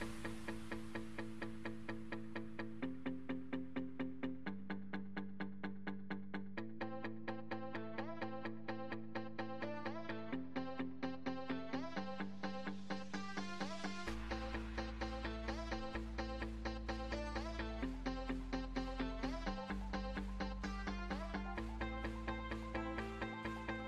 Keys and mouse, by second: 4.4 ctrl+z, 4.8 ctrl+z, 8.0 ctrl+r, 12.1 KP_7, 13.3 z, 14.2 z, 16.1 b, 17.7 Delete, 20.5 Tab, 21.7 z, 23.3 Tab.